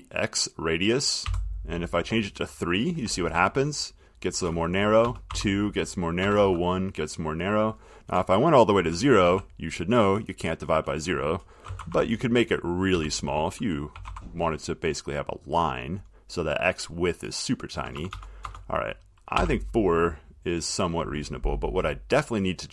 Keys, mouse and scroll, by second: 1.4 3, 3.5 typing, 5.2-6.9 typing, 8.9-9.4 typing, 11.6-14.8 typing, 17.9 BackSpace, 18.1 BackSpace.